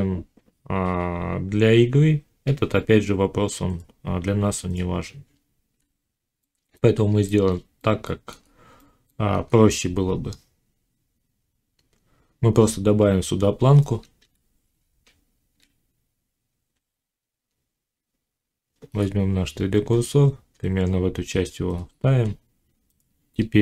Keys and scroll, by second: 4.9 z, 14.1 1, 22.9 Tab.